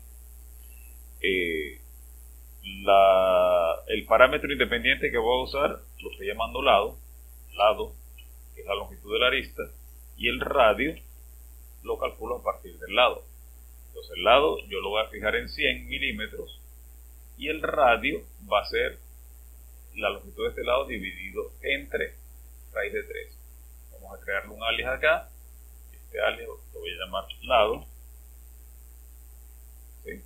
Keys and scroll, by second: 5.1-8.1 typing, 10.0-11.6 typing, 14.4-15.5 typing, 27.0-28.5 typing.